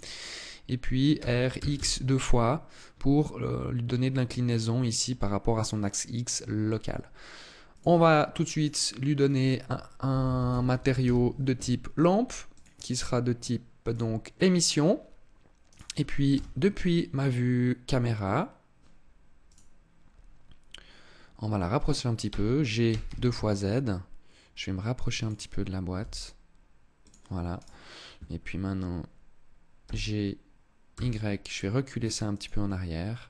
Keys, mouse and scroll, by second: 0.9 r, 7.5 click, 8.3 click, 9.0 click, 12.3 click, 15.4 right click, 16.1 KP_0, 19.2 right click, 22.0 g, 25.1 click, 25.7 g, 26.8 click, 27.3 right click, 29.5 g, 32.1 click.